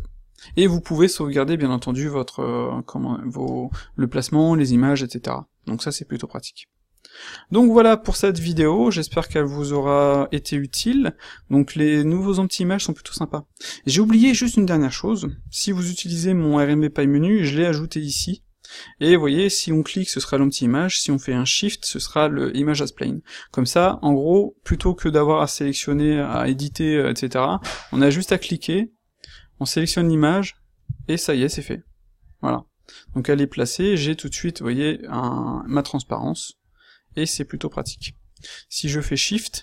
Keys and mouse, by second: 15.2 x, 25.8 x, 30.8 s.